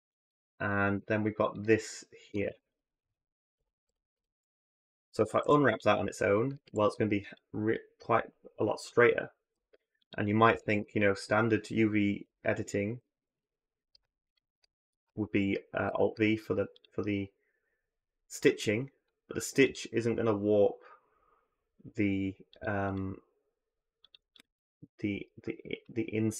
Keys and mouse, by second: 0.5 alt+click, 1.3 alt+shift+click, 2.3 ctrl+z, 3.4 ctrl+KP_Add, 5.2 u, 6.3 a, 6.5 a, 9.3 g, 10.4 click, 12.0 l, 12.8 a, 12.9 a, 13.1 click, 15.7 alt+v, 19.5 click, 22.7 click.